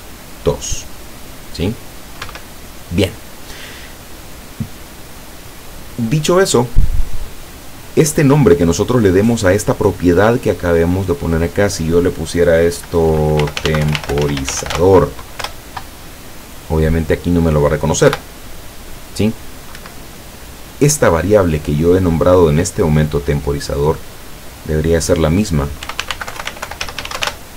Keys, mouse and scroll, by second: 2.3 Escape, 8.2 click, 8.8 click, 11.2 click, 13.4-14.8 typing, 15.5 Return, 18.1 p, 19.9 Escape, 24.4 click, 25.9-27.3 typing.